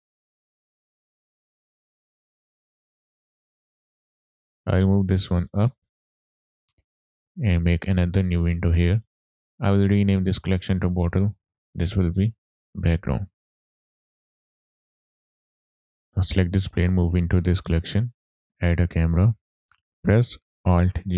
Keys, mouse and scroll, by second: 0.0 click, 0.1 scroll up 3, 0.3 r, 0.6 z, 1.3 click, 1.8 ctrl+z, 1.9-2.3 scroll down 2, 2.1-3.1 typing, 2.6 KP_Enter, 2.8 scroll up 1, 3.5 click, 3.7 scroll down 4, 3.9 middle click, 4.5-6.4 drag, 7.8 click, 9.2 middle click, 9.2 scroll down 1, 9.4 click, 9.9 click, 10.1-14.6 drag, 15.5-16.5 middle drag, 16.5 drag, 17.8 click, 18.6 shift+a, 19.6 shift+middle click, 19.6 scroll up 3, 20.8 alt+g.